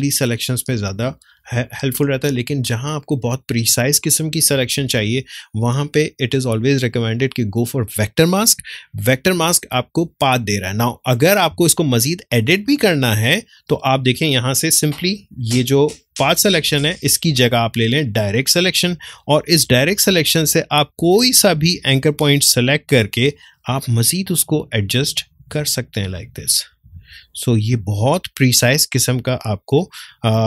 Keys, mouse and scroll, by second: 11.5 space, 12.2-21.6 ctrl+drag, 21.6 ctrl+space, 21.9 ctrl+click, 22.1 ctrl+space, 23.9-27.0 drag, 27.0 space, 27.1-29.4 ctrl+drag, 29.4-30.4 ctrl+drag.